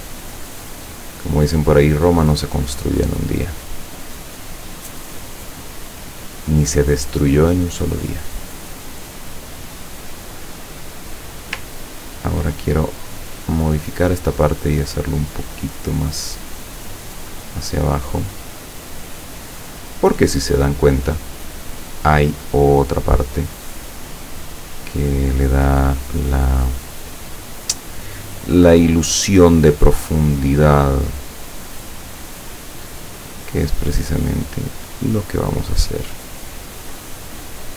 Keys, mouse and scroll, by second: 0.3 click, 1.8 click, 3.1 click, 5.2 scroll down 2, 8.2-8.7 scroll up 2, 9.8 click, 10.7 click, 11.2 click, 12.9 ctrl+click, 15.1-20.3 drag, 21.8 click, 24.8 click, 27.2 click, 29.8 click, 33.3 click, 35.0-36.5 drag, 37.3 click.